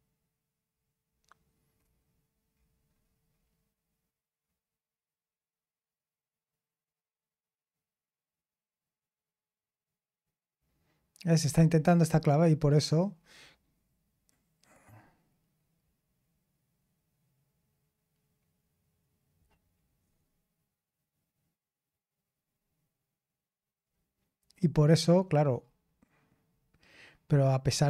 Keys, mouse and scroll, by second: 1.7-3.1 scroll up 2, 3.3-3.6 scroll down 2, 4.4-5.2 scroll up 2, 10.1-10.6 scroll up 2, 10.6-11.9 scroll down 2, 11.9-13.1 drag, 13.1-15.7 scroll down 2, 15.7-23.8 scroll down 1, 23.8-24.7 scroll down 2, 25.1-26.4 scroll down 2, 26.4-27.1 scroll up 2, 27.1 scroll up 1, 27.2-27.8 scroll down 2.